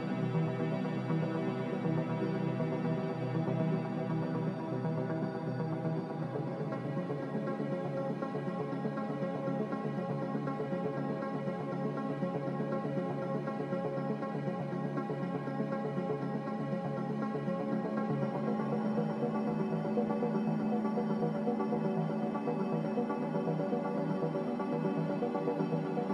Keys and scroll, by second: 6.0 Delete, 17.7 a, 24.1 b.